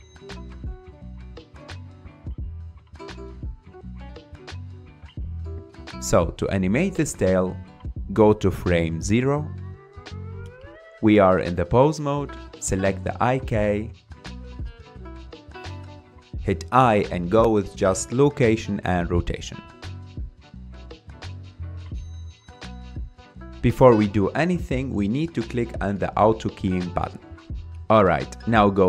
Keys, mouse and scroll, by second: 3.5 click, 4.6-6.2 scroll down 6, 7.0-8.7 drag, 8.7-9.1 scroll up 5, 9.1-9.6 middle drag, 9.6-9.9 scroll down 3, 9.9-10.7 shift+middle drag, 10.7 click, 12.1 ctrl+Tab, 12.8 click, 16.6-17.3 scroll down 1, 17.3 i, 23.0-23.6 scroll down 1, 23.6-25.6 middle drag, 25.6 click, 27.1-28.8 drag.